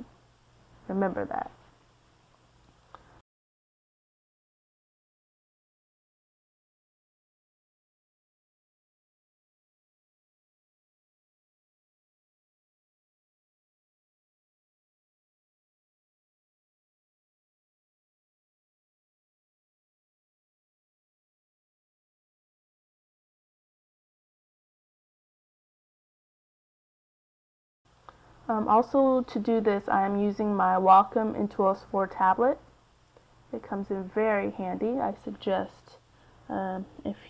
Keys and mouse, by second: 1.2 click, 1.5 typing, 3.2-6.0 middle drag, 7.2-8.5 middle drag, 13.6-14.7 middle drag, 17.2-18.5 middle drag, 22.7 c, 25.2 f, 28.0-29.0 middle drag, 29.5 middle click, 31.0-35.2 drag.